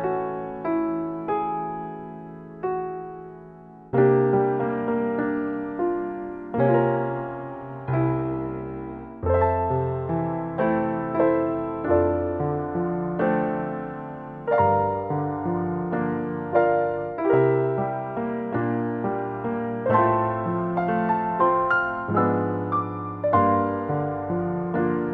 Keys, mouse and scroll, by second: 1.1 scroll down 2, 1.2 middle click, 1.6-2.9 scroll up 11, 1.9 middle click, 2.2 middle click, 2.8 click, 3.4-4.0 scroll down 6, 3.5 middle click, 3.9 middle click, 4.7 click, 5.6 scroll down 4, 5.8 middle click, 6.5 middle click, 7.2 click, 9.2 click, 9.6 click, 15.5 middle click, 17.4 scroll down 1, 17.7 middle click, 19.6 middle click, 21.4-21.9 scroll up 1, 21.9-22.4 scroll down 2, 22.3 shift+middle click, 23.1 scroll up 1, 23.6 scroll down 1, 23.9 middle click.